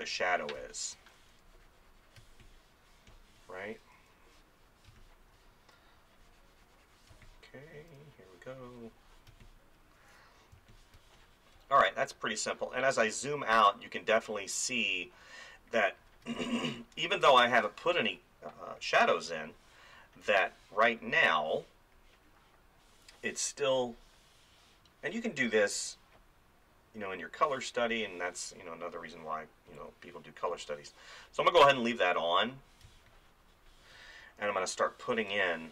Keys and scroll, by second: 0.6 space, 2.2 space, 4.9 space, 7.1 space, 9.3 space, 11.0 space, 16.2 space, 33.0 space, 34.9 ].